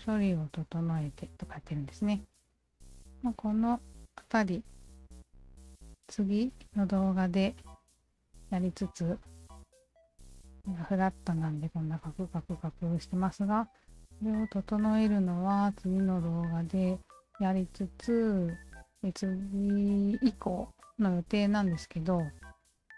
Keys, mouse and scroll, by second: 6.6 click, 9.3 click, 10.1 click, 10.8-12.4 alt+drag, 12.7-13.3 alt+drag, 13.4 alt+drag, 13.8-14.8 alt+drag, 16.0 alt+click, 17.1 alt+click, 17.8-22.9 alt+drag.